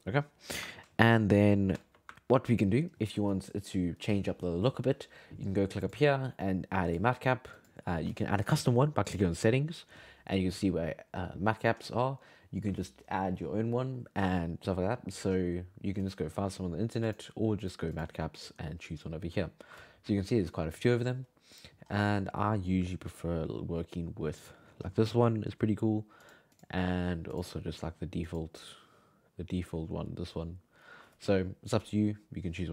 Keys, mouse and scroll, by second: 0.7-5.3 ctrl+middle drag, 5.8-8.9 drag, 17.0-20.1 drag, 24.8 scroll down 5, 25.0-26.2 scroll up 7, 26.2-31.4 drag.